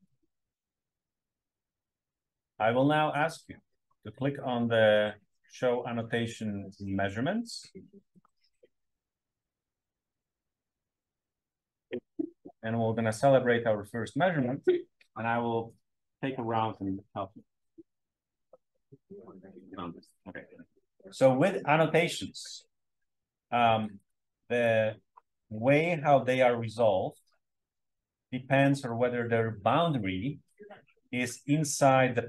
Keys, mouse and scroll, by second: 4.6-8.7 drag, 9.6 click, 13.1-13.8 scroll up 1, 31.3-32.2 scroll up 2.